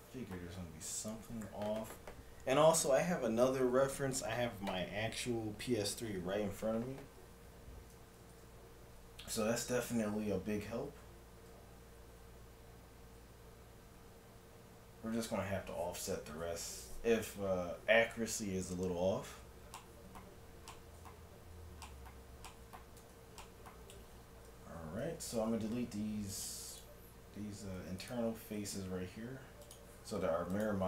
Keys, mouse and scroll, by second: 0.3-3.0 middle drag, 9.4 KP_3, 12.0 KP_7, 19.3 z, 19.8-22.8 middle drag, 21.4 Tab, 23.1 Tab, 24.7 z, 25.4 ctrl+Tab, 26.8-29.9 right drag, 27.6 z, 28.7 x, 30.5-30.8 drag.